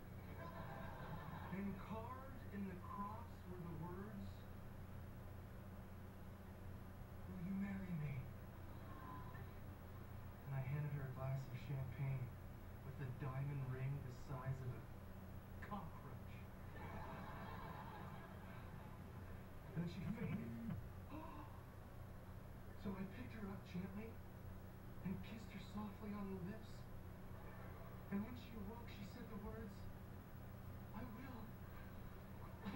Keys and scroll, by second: 19.5 Return, 19.9 ], 20.5 [.